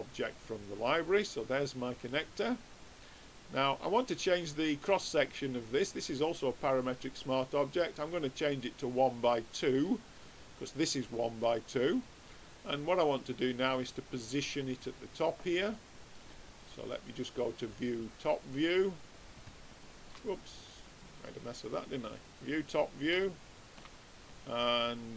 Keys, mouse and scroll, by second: 3.0-6.8 middle drag, 6.8-8.6 drag, 9.3-10.9 middle drag, 11.4 middle click, 13.3-14.9 drag, 15.7-17.3 middle drag, 17.4-19.2 drag, 17.4 middle click, 18.9 middle click, 19.4-20.8 middle drag, 20.8-22.4 drag, 23.2-25.1 middle drag.